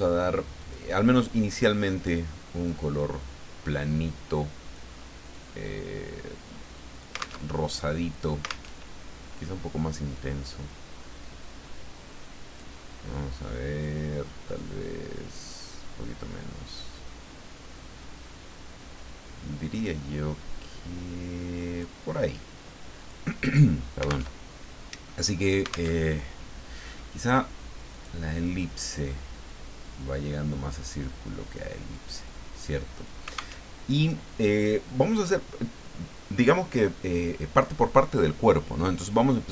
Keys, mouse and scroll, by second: 0.6 click, 2.6-4.9 drag, 5.3-7.4 drag, 7.4 alt+Tab, 8.7 alt+Tab, 10.1-12.7 drag, 13.8-22.0 drag, 23.0 click, 24.4 alt+Tab, 25.9 alt+Tab, 27.9 click, 29.5-31.8 drag, 31.9-33.2 drag, 33.6 alt+Tab.